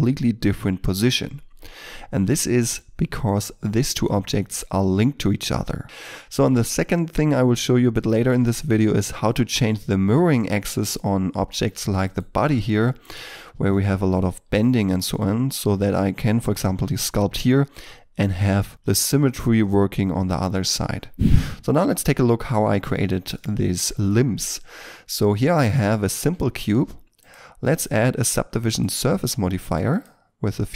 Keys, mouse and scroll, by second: 1.3 shift+middle click, 2.6 middle click, 6.3-6.7 scroll down 1, 6.9 middle click, 8.7-9.1 scroll up 1, 9.1 shift+middle click, 10.3 middle click, 12.0 right click, 12.6 g, 12.9 right click, 14.5 middle click, 20.7 scroll down 1, 23.3 middle click, 24.3-25.8 scroll up 1, 25.9 shift+middle click, 29.9 double click.